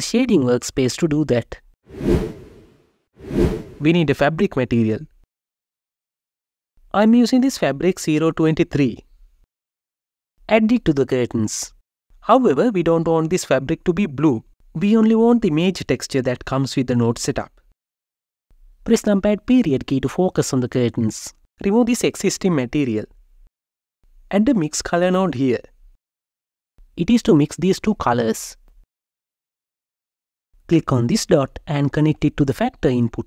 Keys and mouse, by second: 4.2-6.3 drag, 9.7 click, 11.4-14.6 drag, 15.0 n, 18.6 KP_Decimal, 22.8 click, 23.7 right click, 24.2 shift+a, 27.9 click, 31.2 click.